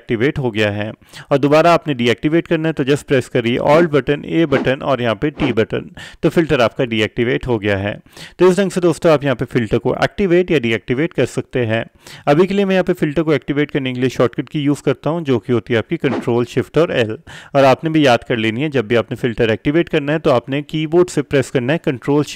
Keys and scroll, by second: 4.6 a, 5.5 t, 16.3 ctrl+shift+l.